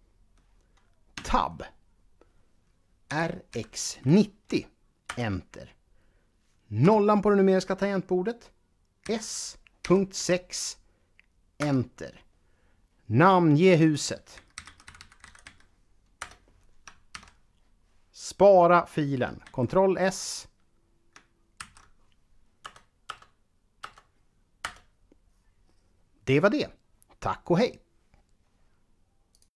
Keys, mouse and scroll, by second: 1.0 Tab, 2.9 r, 3.3 x, 3.8 9, 4.4 0, 4.9 Return, 6.7 KP_0, 8.8 s, 10.0-10.8 typing, 11.3 Return, 13.6 click, 14.1-15.2 typing, 16.0 Return, 16.9 ctrl+c, 19.3 ctrl+s, 21.4 ctrl+v, 22.4 KP_Add.